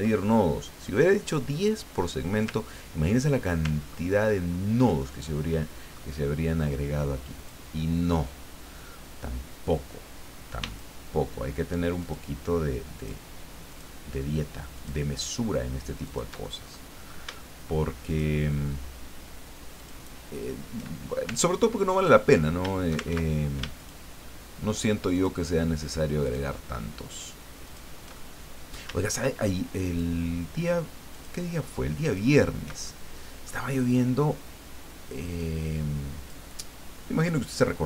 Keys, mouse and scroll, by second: 3.9 ctrl+scroll up 2, 4.5 ctrl+scroll up 2, 5.0-6.7 ctrl+drag, 7.4 click, 10.7 shift+click, 12.0 shift+click, 12.9 shift+click, 13.7 shift+click, 14.7 shift+click, 16.0 shift+click, 16.6 shift+middle click, 18.1 shift+click, 19.8 shift+click, 21.5 ctrl+click, 23.1 ctrl+shift+z, 23.8 shift+click, 25.1 shift+click, 26.2 shift+click, 27.7 shift+click, 28.2 shift+middle click, 29.9 shift+click, 31.1 shift+click, 32.0 shift+click, 32.9-34.2 shift+middle drag, 35.4-36.5 drag, 36.6 middle click.